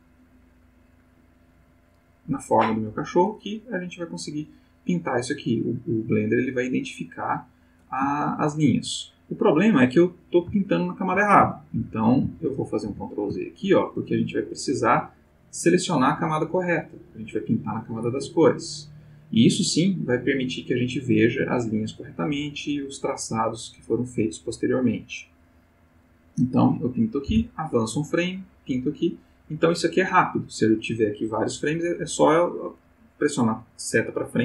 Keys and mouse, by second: 3.3 click, 4.2 click, 8.2 ctrl+middle click, 10.7 ctrl+middle click, 11.8 ctrl+z, 12.9 ctrl+z, 14.4 click, 16.0 click, 18.1 click, 27.3 Right, 27.9 click.